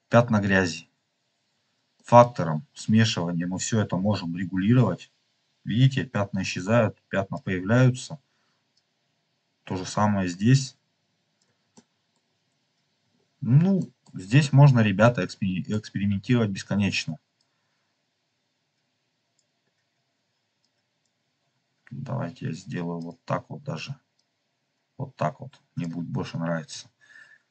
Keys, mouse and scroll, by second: 1.4 scroll up 2, 2.0 middle click, 2.5-3.1 scroll up 2, 3.5-5.1 drag, 6.5 click, 8.7-11.3 drag, 11.7 middle click, 13.0 middle click, 13.0 scroll down 2, 13.9 middle click, 14.2 scroll down 3, 14.9 middle click, 15.9-16.7 scroll up 5, 15.9 middle click, 16.3 middle click, 17.5 click, 19.0 click, 20.5-21.0 drag, 22.9 click, 26.3 scroll down 1, 27.1-27.5 scroll down 2.